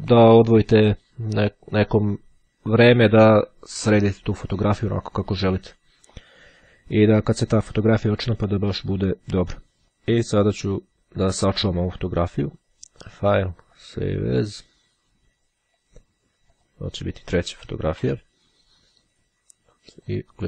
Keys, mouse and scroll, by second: 12.6 click, 13.9 click, 15.9 click, 16.8 click, 17.4 BackSpace, 18.3 3, 20.0 click.